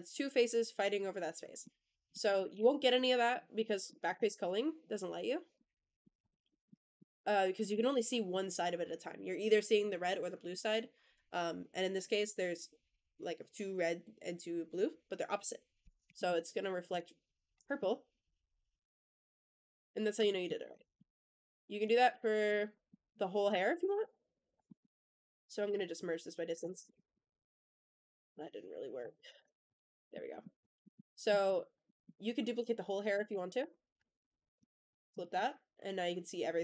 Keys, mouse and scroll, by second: 1.5-2.0 middle drag, 2.1 click, 2.4 Tab, 3.2 middle click, 3.6 scroll up 1, 3.7 middle click, 4.0 Tab, 5.4-5.9 middle drag, 6.1 click, 6.4 shift+middle drag, 6.8 scroll down 1, 6.8-7.5 middle drag, 7.6 shift+middle drag, 16.0 middle drag, 16.8 click, 17.7-20.0 middle drag, 20.2 shift+middle drag, 20.4 scroll down 1, 20.6 middle drag, 21.7 click, 22.6 middle drag, 23.6 ctrl+z, 23.8 ctrl+z, 24.0 ctrl+z, 24.1 ctrl+z, 24.3 ctrl+z, 24.5-25.5 middle drag, 24.7 Tab, 25.0 a, 25.5-26.2 drag, 25.5 m, 26.4 Tab, 26.7 shift+middle click, 27.0-28.2 middle drag, 28.9 Tab, 29.0 a, 29.5 shift+n, 29.8 Tab, 30.0-30.3 middle drag, 30.5 click, 30.7 middle drag, 31.3 click, 31.6 Tab, 31.7 middle click, 33.0 shift+d, 33.5 click, 34.1 alt+n, 34.8 Tab, 35.0 click, 35.2-36.6 middle drag.